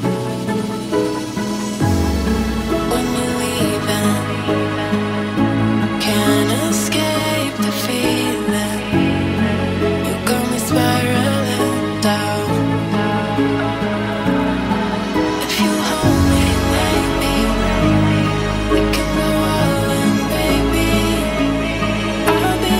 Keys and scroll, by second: 7.8 ctrl+g, 13.5 ctrl+g.